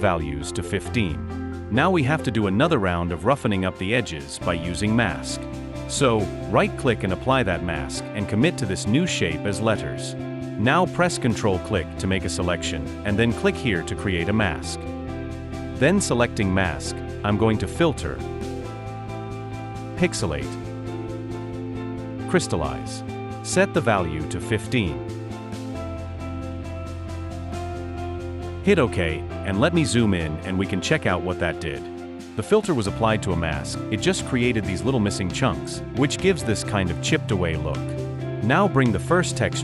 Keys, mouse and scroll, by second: 5.3 right click, 11.3 ctrl+click, 28.5-29.3 typing, 32.9 alt+scroll up 1, 35.0 alt+scroll down 1.